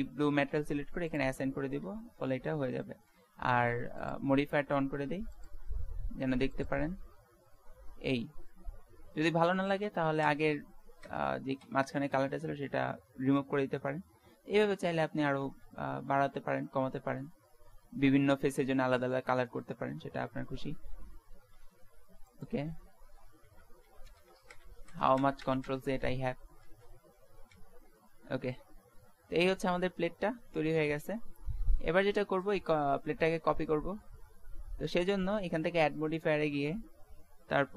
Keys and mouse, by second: 0.3 middle click, 1.1 click, 1.9 Tab, 4.0-6.8 drag, 6.8-8.5 middle drag, 10.3 ctrl+z, 11.1 ctrl+z, 11.6 ctrl+z, 12.4 Tab, 15.4 ctrl+z, 15.9 ctrl+z, 16.3 ctrl+z, 17.0 ctrl+z, 19.9 ctrl+z, 20.3 ctrl+z, 20.7 ctrl+z, 21.0 ctrl+z, 21.6 ctrl+z, 22.3-25.1 middle drag, 22.8 ctrl+z, 23.2 ctrl+z, 23.4 ctrl+z, 23.9 ctrl+z, 24.3 ctrl+z, 24.5 ctrl+z, 24.9-25.6 ctrl+z, 26.0 Tab, 26.7 ctrl+z, 27.5 ctrl+z, 34.3 middle click, 35.1-36.9 drag.